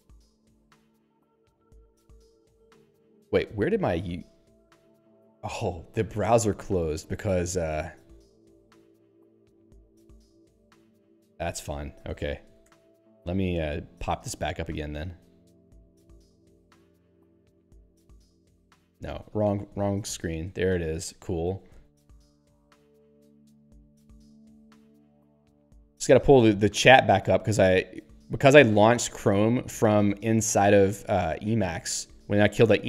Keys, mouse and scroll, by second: 7.5 click, 7.7 click, 8.3 click, 8.4 click, 11.5 alt+&, 12.0 alt+p, 12.7 Return, 15.7 Return, 16.7 click, 16.8 click, 17.6 ctrl+w, 17.8 c, 21.7 c, 23.0 click, 23.1 click.